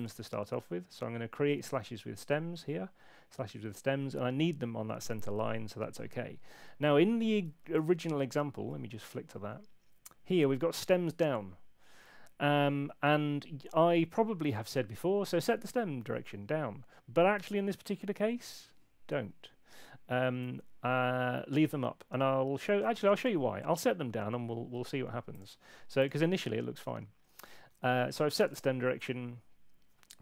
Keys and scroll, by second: 7.7 super+Tab, 15.2 super+Tab, 27.7 super+2.